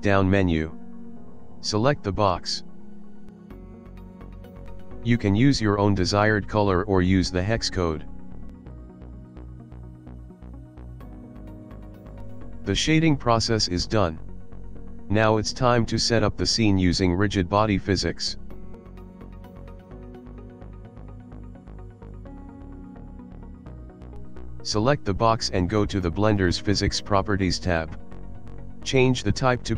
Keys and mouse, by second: 17.7 click, 18.7 ctrl+middle click, 19.2 middle click, 20.3 shift+middle click, 20.6 middle click, 21.6 middle click, 22.5 click, 24.1 middle click, 26.0 click, 26.8 click, 27.8 click, 29.4 click.